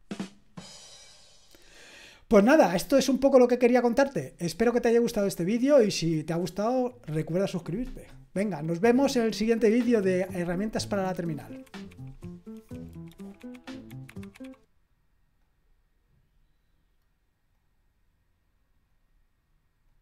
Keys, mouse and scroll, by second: 18.9 click, 19.9 click.